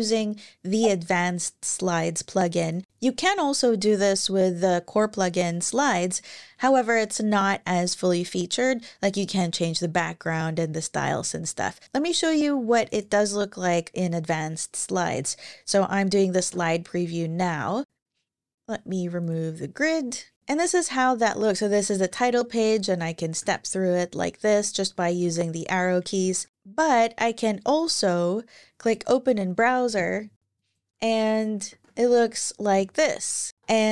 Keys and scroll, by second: 16.1 shift+super+e, 21.8 Right, 23.1 Right, 25.0 Right, 25.9 Left, 31.4 ctrl+alt+i, 33.6 s.